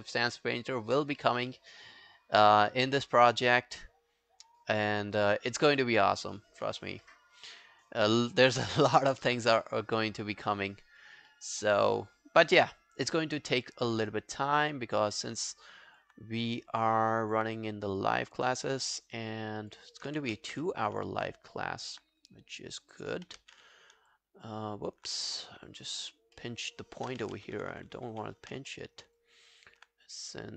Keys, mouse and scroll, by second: 0.1 alt+click, 5.5 alt+scroll down 5, 5.8 alt+click, 6.4 alt+middle click, 6.7-7.1 alt+scroll down 5, 7.1 alt+middle click, 7.4 alt+right click, 7.6 alt+click, 9.2 alt+click, 11.3 alt+middle click, 11.6 alt+right click, 11.9 alt+click, 13.2 alt+click, 18.8 alt+middle click, 19.0 alt+right click, 19.3 alt+click, 20.4 ctrl+z, 20.8 alt+click, 21.7 alt+click, 23.3 alt+click, 23.4 ctrl+z, 24.5 alt+click, 25.7 alt+click, 26.4 alt+middle click, 26.8-27.1 alt+scroll down 1, 27.4 ctrl+z, 27.6 ctrl+z, 27.9 ctrl+z, 28.1 ctrl+z, 28.7 alt+middle click, 29.0 alt+right click, 29.2 alt+click.